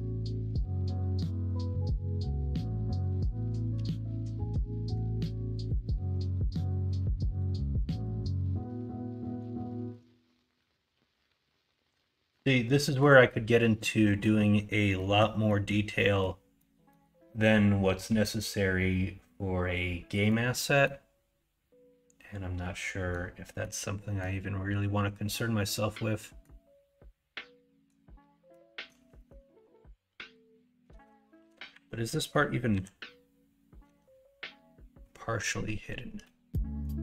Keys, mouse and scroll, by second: 5.8 middle drag, 6.1 Tab, 7.1 middle click, 7.6 middle click, 8.1 middle click, 9.5 shift+middle click, 10.5-12.1 middle drag, 12.7 middle click, 13.6 middle click, 14.2 middle click, 14.9 middle click, 15.4 middle click, 15.9 middle click, 16.5 middle click, 20.2 middle click, 20.8-23.1 middle drag, 23.6 middle click, 25.7 middle click, 28.5 middle click, 29.2 middle click, 31.3 KP_1, 31.7 KP_3, 32.7 /, 33.8 /, 36.2 middle click.